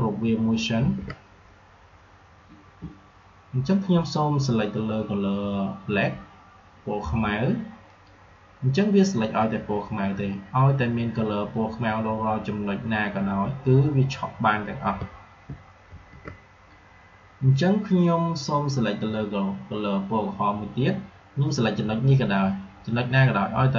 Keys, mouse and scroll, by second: 0.7 ctrl+g, 7.8 click, 15.4 ctrl+Num_Lock, 15.4 click, 15.8 ctrl+g.